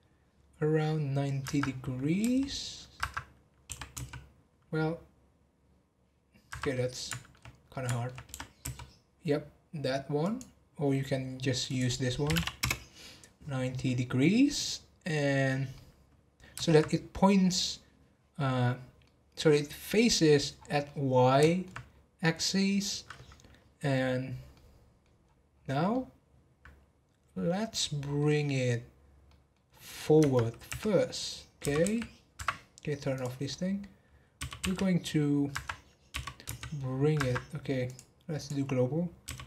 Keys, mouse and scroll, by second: 6.7-8.3 middle drag, 8.3 r, 11.7-14.8 drag, 15.7-18.7 middle drag, 19.0-20.2 middle drag, 20.2 scroll down 2, 20.8-21.8 middle drag, 21.8 scroll up 1, 24.1-24.5 scroll down 1, 24.5-25.2 middle drag, 25.2-25.9 scroll up 1, 25.9-28.3 middle drag, 28.3-28.9 scroll down 6, 29.2 middle click, 29.6 scroll up 2, 30.2 Tab, 33.1 click, 33.5 middle click, 34.3 g, 36.1 g, 37.8-39.2 drag, 39.2 g.